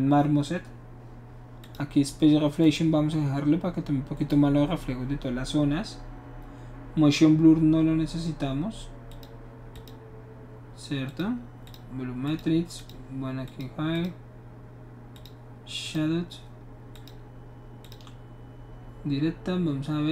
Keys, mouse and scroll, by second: 1.6 click, 2.6 click, 9.1 click, 9.7 click, 11.1 click, 11.6 click, 12.3 click, 12.8 click, 13.4 click, 13.9 click, 15.1 click, 15.8 click, 16.9 click, 17.8 click.